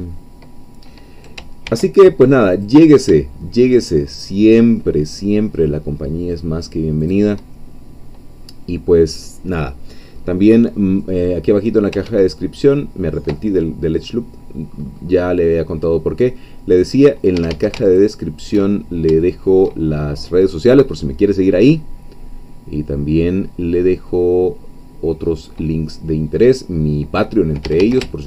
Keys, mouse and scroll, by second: 1.7 ctrl+r, 2.6 click, 7.0 shift+click, 10.1-10.8 scroll down 2, 10.8-11.7 scroll up 2, 11.7-12.0 scroll down 3, 12.0 ctrl+z, 14.2 scroll down 2, 14.7-15.4 scroll up 2, 15.4-16.2 scroll down 2, 16.2-17.4 scroll down 1, 17.4 middle click, 17.4 a, 18.0 alt+shift+click, 18.8-19.1 alt+shift+scroll down 1, 19.2 shift+middle click, 20.0-20.3 shift+scroll up 1, 20.9-27.6 middle drag, 27.6 a.